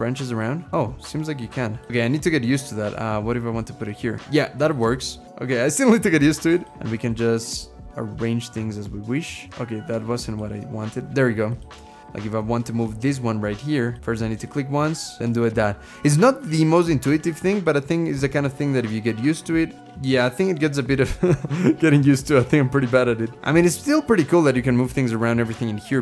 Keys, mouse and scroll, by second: 6.7 typing, 25.9 space.